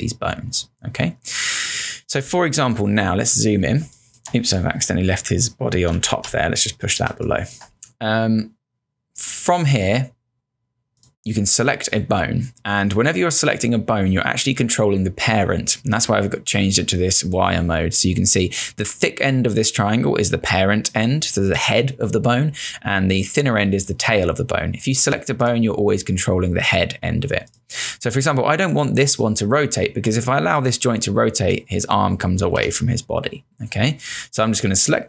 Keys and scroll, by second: 3.8 ctrl+space, 6.0 shift+Down, 7.1 space, 32.5 ctrl+z.